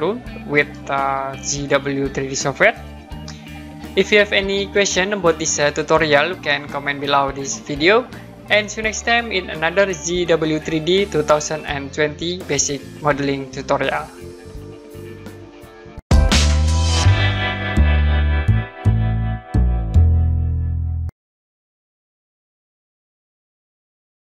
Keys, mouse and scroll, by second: 1.5 middle click.